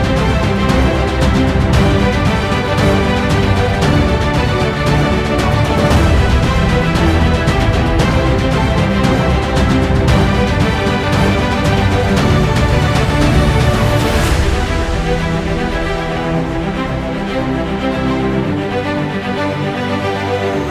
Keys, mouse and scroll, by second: 0.6 alt+middle click, 0.9 click, 1.6 alt+middle click, 1.6 alt+click, 1.8-2.3 scroll down 2, 1.9 click, 2.3 click, 2.6 scroll up 1, 2.8 click, 2.9 alt+middle click, 3.2 alt+click, 3.5 scroll down 1, 3.6 alt+click, 4.0 alt+middle click, 4.0 alt+click, 4.3 alt+middle click, 4.4 alt+click, 4.7 alt+middle click, 4.8-6.0 alt+drag, 6.0 ctrl+z, 6.1 alt+click, 6.2 alt+middle click, 6.5 click, 6.8 scroll up 1, 6.9 alt+middle click, 7.8 ctrl+z, 7.9 click, 8.6 ctrl+z, 8.7 click, 9.0 alt+middle click, 9.1 click, 9.4 alt+middle click, 9.8 alt+click, 10.1 alt+middle click, 10.2-11.3 alt+drag, 11.3 alt+middle click, 11.4 click, 11.7 alt+middle click, 12.3 right click, 12.6-13.8 drag, 13.8 alt+middle click, 13.9 alt+click, 14.2 alt+middle click, 14.4 alt+click, 14.6 alt+middle click, 14.8 click, 14.9 alt+middle click, 15.0-16.5 alt+drag, 16.5 alt+middle click, 16.6 click, 16.8 alt+middle click, 16.9 scroll up 1, 17.0 click, 17.7-18.7 scroll down 2, 18.5 alt+middle click, 18.7 alt+click, 19.2 alt+middle click, 19.3 click, 20.2 alt+middle click, 20.4-20.7 drag.